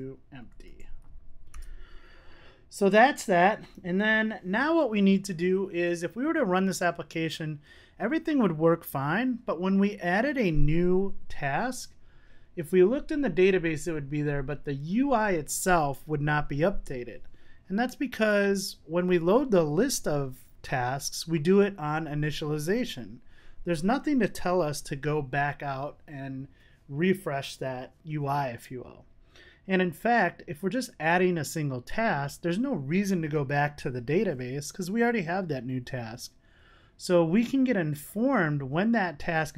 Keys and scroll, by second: 2.9 super+s.